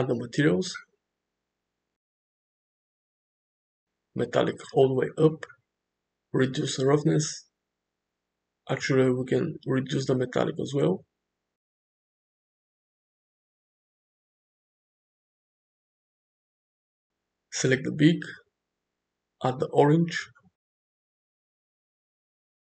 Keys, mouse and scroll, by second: 1.4 click, 3.6 click, 4.5-5.3 middle drag, 7.3-9.1 drag, 10.5-13.5 drag, 13.8 middle click, 19.1 click, 20.5 click.